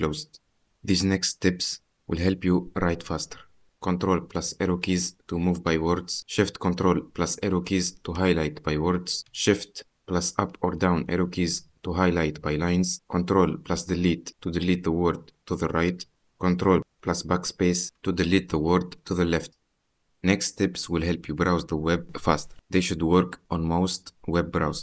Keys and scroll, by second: 4.9 ctrl+Right, 6.0 Left, 7.3 ctrl+shift+Right, 9.8 ctrl+shift+Up, 11.2 Down, 13.4 ctrl+Delete, 16.0 ctrl+Delete, 17.1 ctrl+BackSpace.